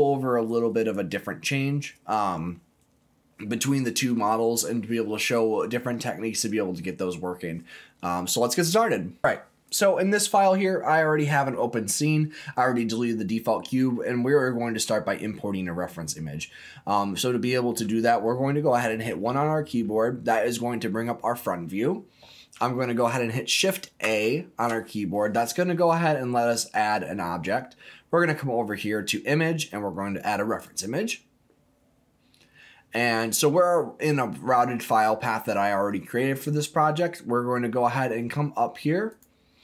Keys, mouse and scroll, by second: 19.0 KP_1, 24.0 shift+a.